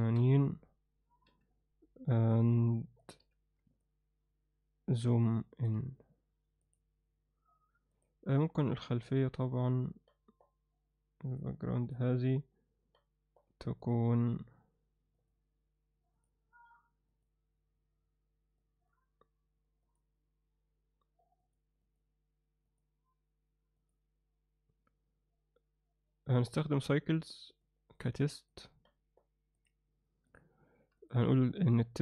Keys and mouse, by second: 1.3 n, 2.3 drag, 3.0 click, 3.2 n, 3.8-5.0 ctrl+alt+middle drag, 5.2 alt+shift+middle click, 6.6 click, 7.9 click, 10.1-10.5 middle drag, 11.3 drag, 11.8 click, 12.9-13.4 middle drag, 13.8 drag, 27.6 click, 28.5 click, 28.9 middle click, 29.6 click, 30.3 click, 31.0 click.